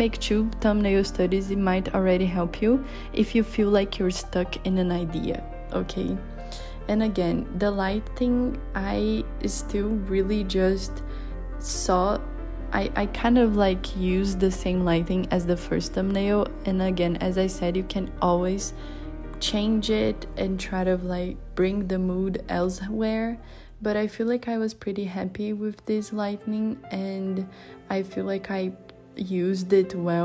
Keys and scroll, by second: 0.2 z, 1.0 z, 5.7 z, 7.0 b, 11.6 b, 16.1 b.